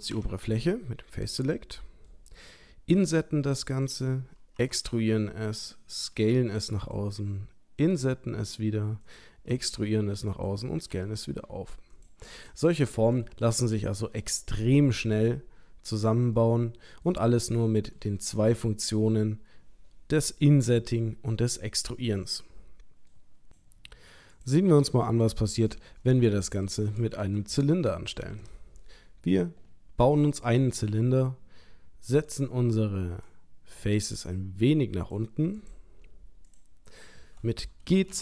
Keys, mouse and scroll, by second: 0.2 3, 0.5 click, 1.6 middle click, 3.0 i, 4.8 e, 6.1 s, 7.9 i, 9.6 e, 11.0 s, 12.6 middle click, 13.2 middle click, 13.6 ctrl+middle click, 14.2 middle click, 16.4 ctrl+middle click, 18.3 shift+middle click, 18.8 shift+middle click, 22.2 middle click, 24.3 click, 26.1 Tab, 27.2 Delete, 28.3 shift+a, 32.3 click, 33.3 click, 36.5 click, 37.8 g.